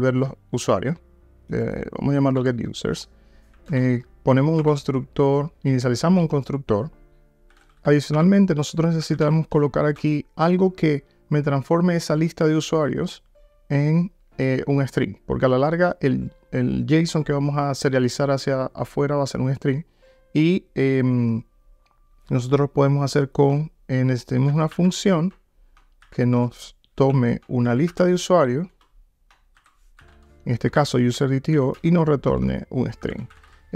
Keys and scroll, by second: 3.7 alt+Return, 8.2 Return.